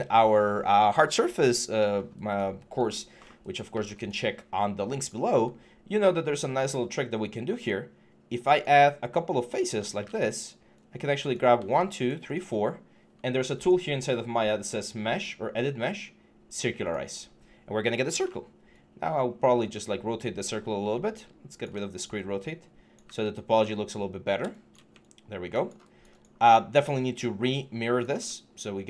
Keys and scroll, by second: 17.9 e, 20.7-21.5 typing, 22.8 w.